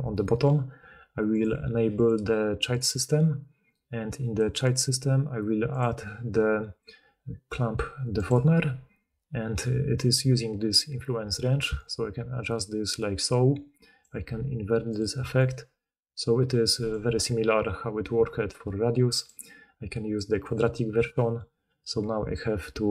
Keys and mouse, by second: 2.7 click, 4.7-14.9 drag, 14.9 shift+middle click, 15.4-22.9 shift+drag.